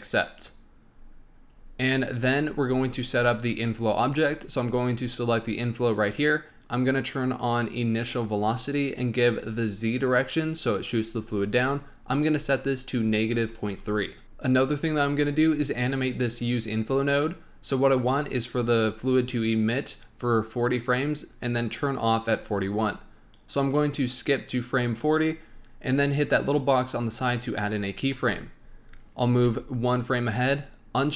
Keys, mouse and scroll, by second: 1.5-2.5 scroll up 6, 2.5-4.4 scroll up 5, 4.4 click, 7.9 click, 12.1-14.2 drag, 22.6-25.6 drag, 26.4 click, 29.3 Right.